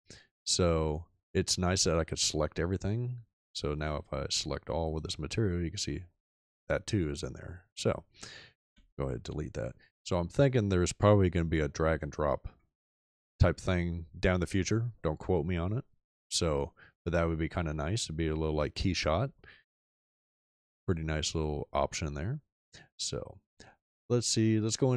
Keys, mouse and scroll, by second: 8.6 x.